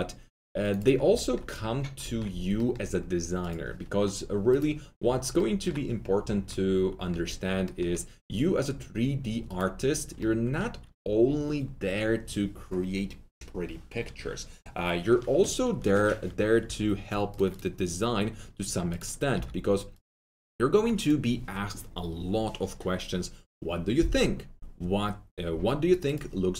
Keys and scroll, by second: 16.6 2.